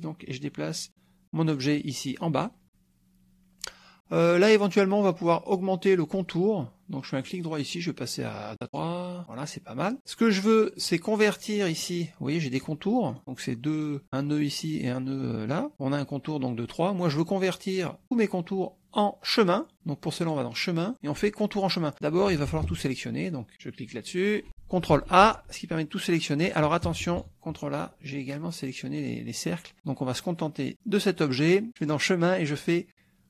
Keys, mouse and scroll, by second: 2.2 click, 7.3 right click, 8.6 click, 10.8 click, 11.6 middle click, 12.6 click, 13.0 middle click, 13.2 click, 20.2 click, 21.9 click, 22.5 KP_Subtract, 24.1 click, 25.2 ctrl+shift+a, 26.8 KP_Subtract, 30.7 click, 31.9 click.